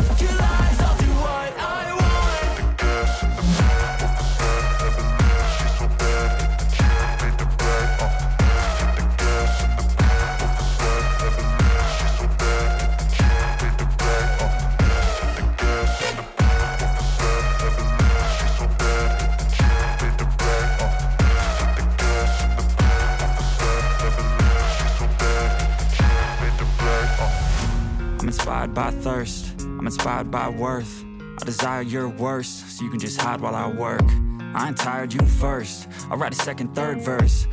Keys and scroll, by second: 12.3 alt+F7, 34.8 ctrl+d.